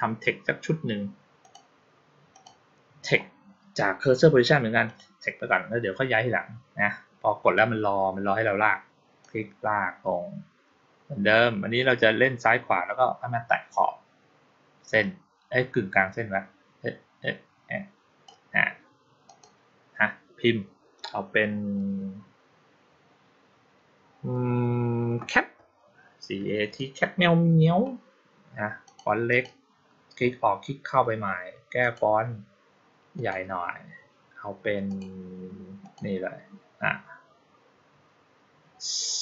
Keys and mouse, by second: 1.3 click, 2.2 click, 4.7 click, 9.1-18.1 drag, 19.1 click, 28.7 click, 29.2 click, 31.7 click, 33.0 click, 34.7 click, 35.7 click.